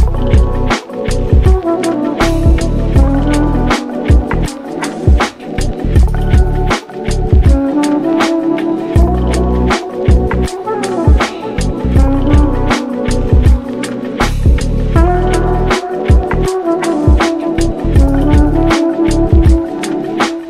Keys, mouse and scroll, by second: 0.0 click, 0.6-3.2 drag, 3.3 drag, 5.0 click, 5.4 ctrl+s, 5.7-6.1 shift+middle drag, 6.1 click, 6.7-8.3 drag, 8.5 scroll down 1, 8.7 shift+middle drag, 8.9 ctrl+s, 9.4 click, 10.2-11.4 drag, 12.9 click, 13.2 scroll up 3, 13.5 Tab, 13.9 click, 14.7 3, 14.9 click, 15.2 shift+click, 16.3-20.4 drag.